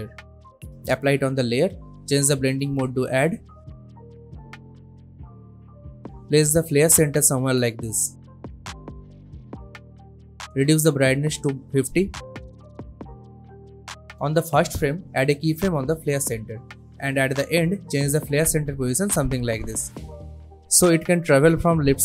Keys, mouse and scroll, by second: 0.0-0.1 typing, 1.0 click, 6.2-6.8 drag, 11.6 Return, 13.9-17.4 drag, 21.2 space.